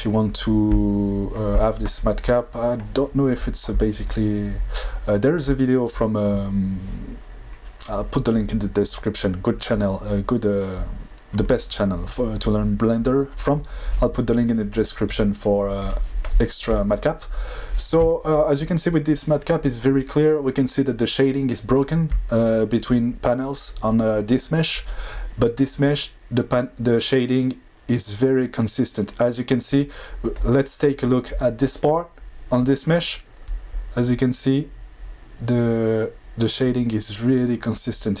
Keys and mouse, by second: 15.0-17.1 drag.